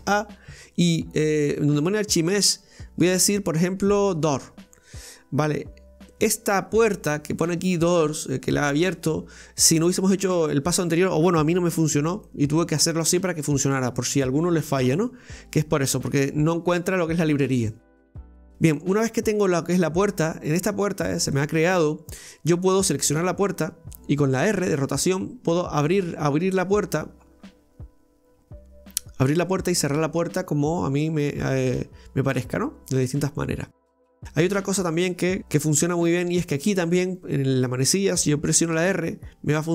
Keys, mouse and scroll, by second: 10.1 scroll, 12.3-13.6 middle drag, 13.6-14.3 scroll, 16.3-16.9 shift+middle drag, 16.9-17.7 scroll, 17.7-20.7 middle drag, 21.3-22.8 shift+middle drag, 22.8 right click, 24.6 r, 35.4 ctrl+z, 36.5 right click, 37.1 right click, 38.8 r.